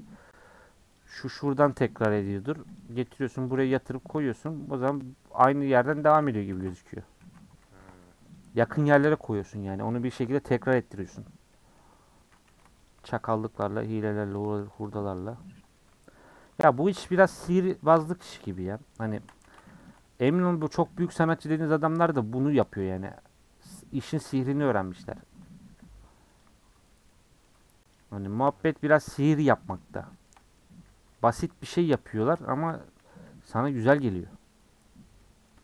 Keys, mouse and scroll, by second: 1.3 click, 1.7 g, 2.9 r, 3.5 g, 6.2 ctrl+z, 6.5 ctrl+z, 7.0 click, 7.2 ctrl+z, 7.7 ctrl+z, 8.3 click, 11.5 middle click, 11.8-12.2 scroll up 5, 12.5 2, 12.9 alt+click, 13.9 alt+click, 14.8 alt+click, 15.4-16.5 middle drag, 16.5 alt+shift+click, 16.7 middle click, 17.9 alt+shift+click, 18.1 middle click, 19.0 alt+shift+click, 19.4 ctrl+z, 19.9 alt+shift+click, 20.6 a, 21.7 u, 24.1 middle click, 24.4-24.8 scroll down 4, 24.8 middle click, 25.4-26.4 scroll up 3, 27.1 middle click, 28.5 middle click, 28.9 scroll down 1, 29.0 middle click, 29.5 scroll down 1, 30.6-31.7 scroll up 3, 31.7 alt+click, 32.2 alt+shift+click, 32.8 a, 34.2 click, 35.4-35.6 shift+middle drag.